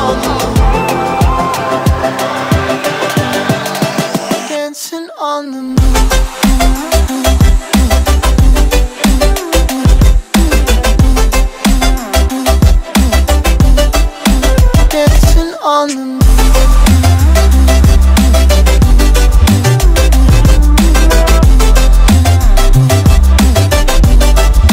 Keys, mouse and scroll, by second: 1.2 click, 1.8 click, 2.1 click, 4.0 click, 5.0 click, 8.6 click, 13.4 click, 14.1 click, 16.2 click, 16.5-16.9 scroll up 3, 16.9 alt+click, 17.3 alt+middle click, 17.4 alt+right click, 17.5 alt+click, 19.2 click, 19.6 ctrl+z, 20.3 click, 21.3 click, 23.3 click, 23.9-24.2 alt+drag, 24.2 alt+middle click, 24.5 click.